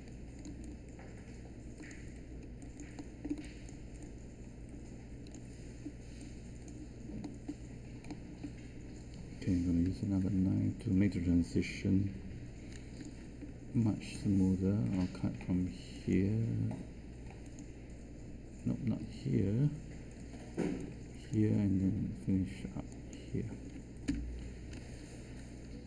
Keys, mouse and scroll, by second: 9.8 k, 20.1 z, 24.0 Return.